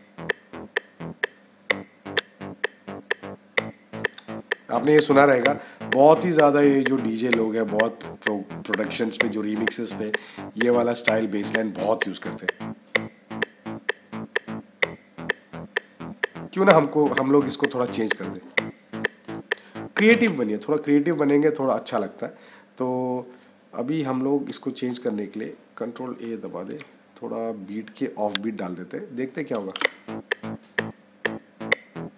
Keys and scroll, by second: 19.9 -, 26.6 ctrl+a, 29.6 -.